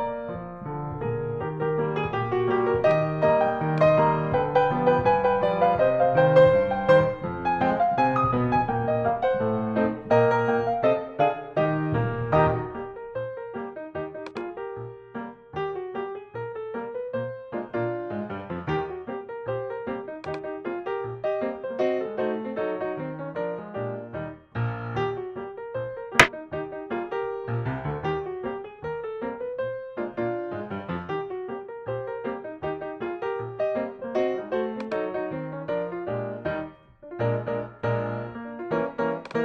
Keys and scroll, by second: 1.0 shift+super+3, 4.0 space, 8.7 space, 11.9 Up, 16.9 q, 20.7 space, 33.5 shift+super+3.